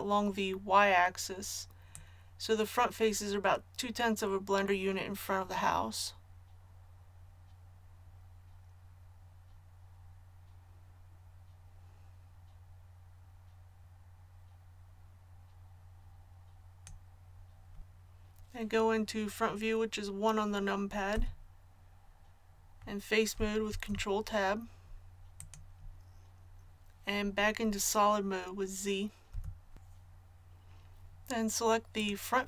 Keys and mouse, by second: 1.9-16.8 drag, 21.1 KP_1, 23.7 ctrl+Tab, 29.3 z.